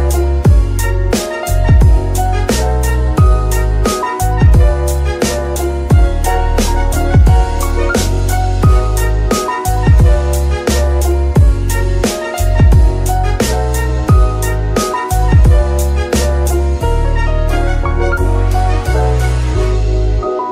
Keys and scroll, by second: 0.3 ctrl+Tab, 8.1 g, 8.2 y, 10.2 Escape, 14.2 space, 17.6 KP_1, 17.8 Return, 20.2 KP_0, 20.4 KP_Decimal.